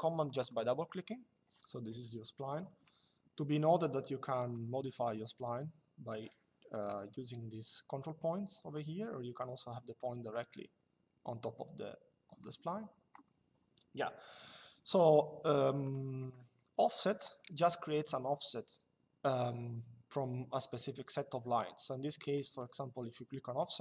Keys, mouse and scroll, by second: 0.0 click, 2.0 Escape, 4.3 click, 9.7 click, 15.5 click, 22.0 click.